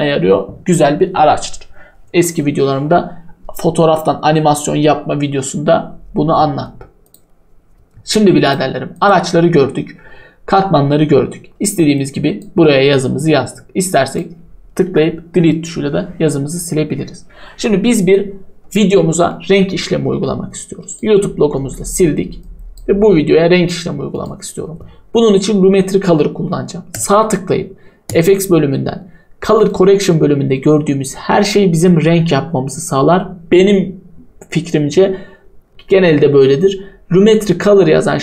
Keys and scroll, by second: 14.9 Delete, 21.6 Delete.